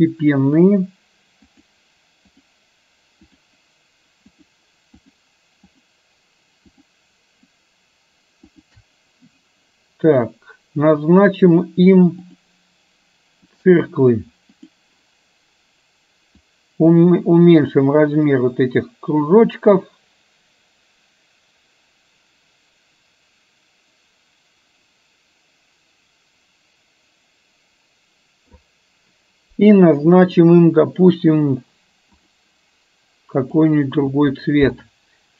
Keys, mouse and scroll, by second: 0.6-1.0 shift+drag, 2.4 shift+click, 3.4 shift+click, 5.0 shift+click, 6.8 shift+click, 8.6 shift+click, 12.4-13.9 drag, 14.5 click, 16.5-28.6 drag, 30.5 click, 31.4-32.5 drag, 33.4 click.